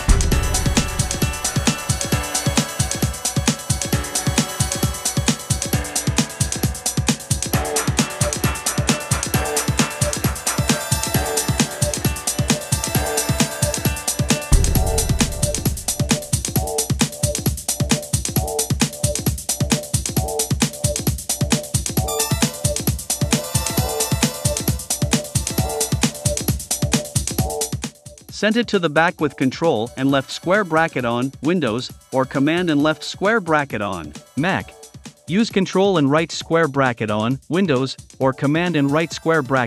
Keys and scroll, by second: 6.5 v, 19.9 super+c, 20.1 super+f, 20.7 shift+Up, 22.1 shift+Up, 22.6 shift+Up, 24.2 shift+Down, 25.3 shift+Up, 28.4 super+[, 30.1 Down, 30.6 Down, 35.7 Down, 36.4 shift+Down, 38.3 Up.